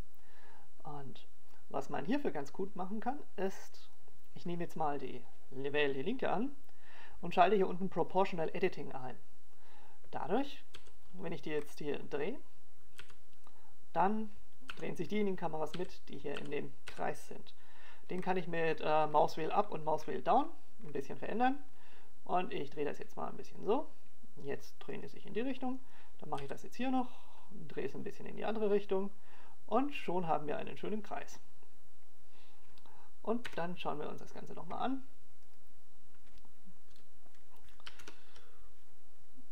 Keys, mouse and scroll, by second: 0.8-1.2 scroll up 1, 2.5-2.9 scroll down 1, 6.4 right click, 10.6 click, 13.4 g, 18.4 g, 19.6 r, 27.8 click, 28.6 right click, 29.2 r, 32.9 click, 36.3 KP_0, 38.2 click.